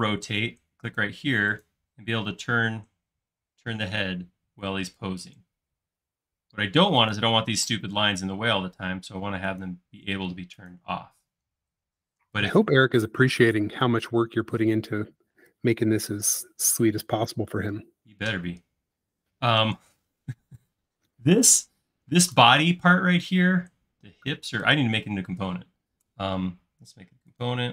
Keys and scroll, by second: 7.8 space, 13.2 super+z, 13.9 super+z, 14.3 super+z.